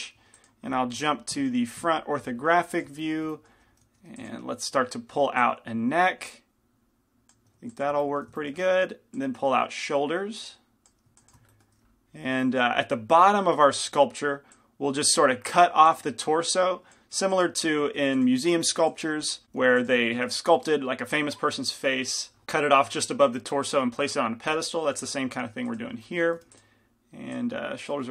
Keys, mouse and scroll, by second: 0.3 f, 1.5-2.7 drag, 1.5 KP_1, 1.9 KP_5, 2.7 f, 3.1-7.5 drag, 3.3-7.5 middle drag, 4.0 f, 7.7 f, 8.1-11.0 middle drag, 11.3 f, 11.6-14.0 middle drag, 14.0-25.5 drag, 15.7 f, 17.3 f, 18.0 f, 19.7 f, 25.5 f, 26.1-28.1 drag, 26.1 middle click, 26.5 f.